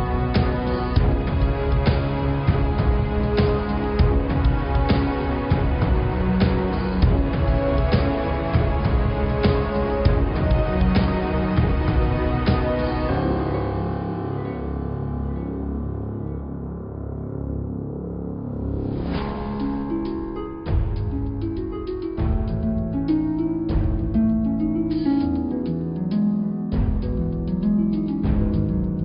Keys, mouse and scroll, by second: 0.7 g, 8.1 click, 8.3-8.7 scroll up 3, 8.7 middle click, 9.4 scroll down 4, 9.7 middle click, 10.0 scroll up 1, 11.5 middle click, 12.0 click, 13.7 e, 16.5-18.8 middle drag, 20.5 click, 20.9 g, 24.8-26.7 middle drag, 26.7 ctrl+z, 26.9 ctrl+z, 27.3 click, 28.0 g.